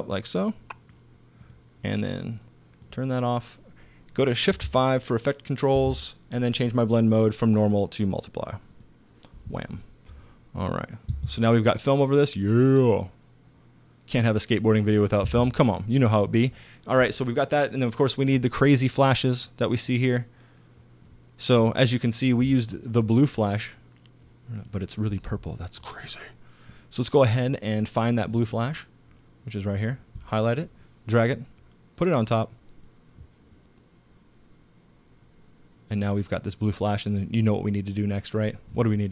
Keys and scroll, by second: 5.8 shift+5, 11.1 space, 15.2 space.